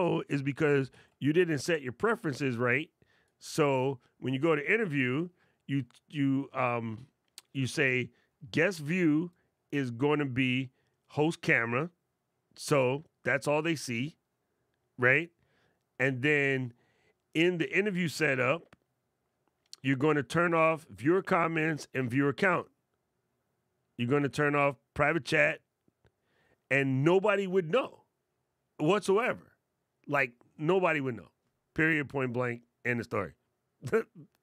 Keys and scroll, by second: 0.5 super+,.